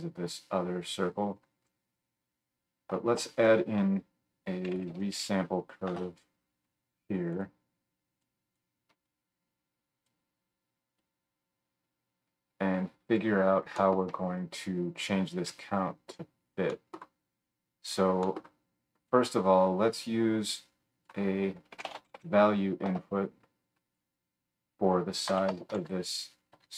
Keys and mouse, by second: 3.2 F3, 7.4-8.2 drag, 23.9 click, 25.6 KP_0.